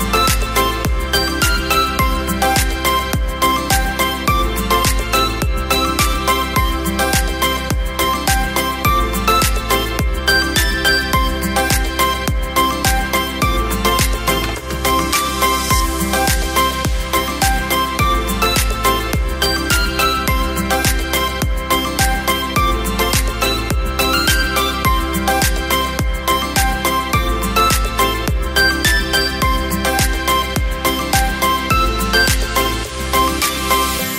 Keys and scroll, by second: 5.3 space, 9.0 space, 15.7 b, 16.6 ], 20.8 ], 31.1 v, 31.7 space.